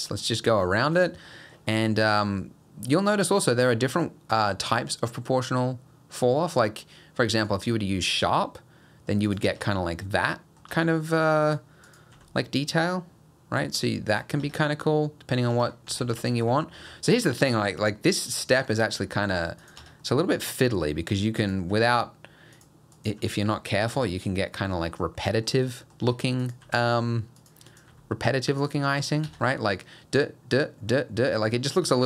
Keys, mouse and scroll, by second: 0.2 middle click, 1.0 click, 1.3 middle click, 2.2 click, 4.0 click, 8.0 g, 9.5 Tab, 9.7 middle click, 10.7 Tab, 10.9 middle click, 11.4 click, 11.9 click, 12.1 g, 14.4 Tab, 14.6 middle click, 15.5 Tab, 16.0 ctrl+z, 16.4 ctrl+z, 16.8 ctrl+z, 17.4 middle click, 17.8 click, 18.3 click, 18.6 g, 19.8 Tab, 20.0 middle click, 20.8 Tab, 20.9 middle click, 21.4 click, 21.7 g, 23.0 click, 23.2 g, 24.0 Tab, 24.4-24.7 scroll down 2, 24.7 middle click, 25.3 middle click, 25.5 scroll up 1, 25.8 middle click, 26.0 Tab, 26.7 click, 26.7 g, 27.7 click, 27.9 g, 29.3 Tab, 29.4 middle click, 30.9 middle click, 31.5 middle click, 31.9 Tab.